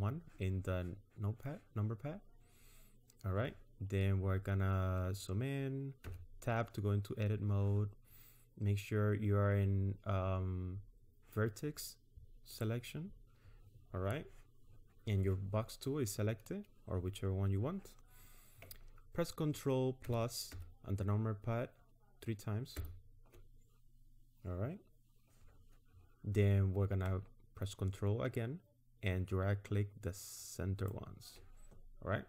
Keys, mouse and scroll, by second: 4.1-4.7 scroll up 4, 6.0 Tab, 7.0-7.4 scroll up 2, 12.5 click, 20.0 ctrl+KP_Add, 20.5 ctrl+KP_Add, 22.8 ctrl+KP_Add, 28.4 ctrl+click.